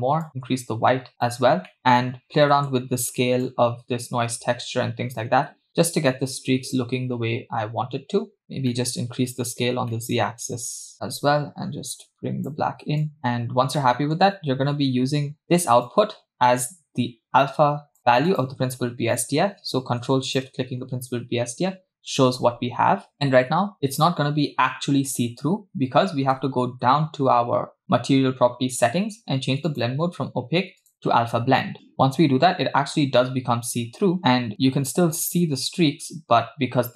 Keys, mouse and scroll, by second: 0.2-1.4 drag, 1.7 middle click, 2.1-2.4 scroll up 2, 2.5 middle click, 3.4-8.4 drag, 8.4-8.7 scroll down 2, 8.7 middle click, 9.7 scroll down 2, 9.9-11.1 middle drag, 12.0-12.6 drag, 13.0 click, 13.3-13.8 scroll down 3, 13.8 middle click, 14.5-15.4 scroll up 2, 15.4 scroll up 1, 15.9 click, 16.5 click, 18.3 click, 20.5 ctrl+shift+click, 25.8-26.9 scroll down 2, 26.9-28.1 scroll down 1, 28.1-29.7 scroll down 3, 29.7 scroll down 2, 29.7-31.1 drag, 34.5 scroll up 3, 35.3-35.6 scroll up 2, 35.6 scroll down 2.